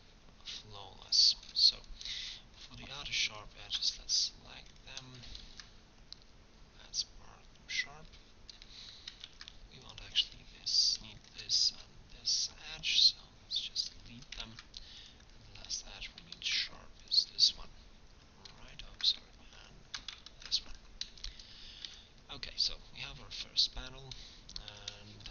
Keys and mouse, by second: 5.5 ctrl+e, 9.3 ctrl+Tab, 11.7 x, 14.5 ctrl+Tab, 16.4 ctrl+e, 20.3 ctrl+e, 21.9 Tab, 24.7 Tab.